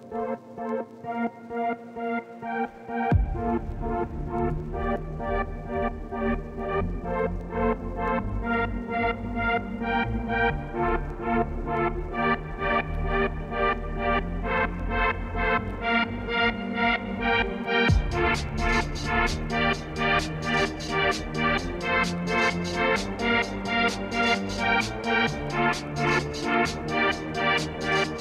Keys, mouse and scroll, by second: 1.1 middle click, 1.8-3.0 drag, 3.3-4.5 middle drag, 4.5 scroll up 1, 4.7-6.3 middle drag, 6.3-8.3 shift+right drag, 8.3 Tab, 8.5 Tab, 8.6 x, 8.8 shift+a, 10.7-12.1 drag, 12.4 Tab, 12.4 s, 13.2 middle click, 13.4 r, 18.3-19.7 alt+drag, 19.7 Tab, 21.1 middle click, 22.0 g, 22.5 middle click, 22.6-23.5 scroll down 2, 23.5-23.8 scroll down 1, 23.8 click, 23.9 middle click, 24.1 scroll up 2, 24.4 click, 24.6-25.8 shift+drag, 25.8 scroll down 7, 26.0 click, 26.2 ctrl+s, 26.4 shift+middle click, 26.9 click, 27.2 middle click, 27.4 s.